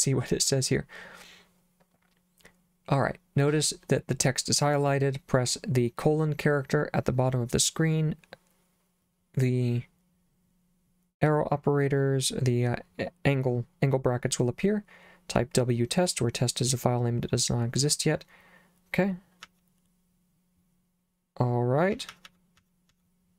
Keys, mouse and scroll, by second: 19.5 j, 22.0-22.9 typing.